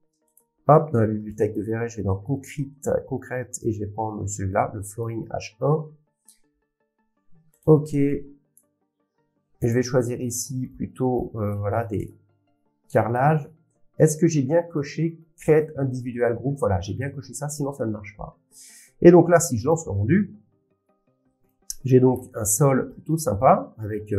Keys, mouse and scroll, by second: 1.5 click, 2.8 click, 5.0 click, 7.6 click, 9.7 click, 12.0 click, 14.7 click, 19.7 click, 21.9 middle click, 22.1 middle click, 22.8 middle click, 23.2 middle click, 23.2 scroll, 23.8 scroll down 6.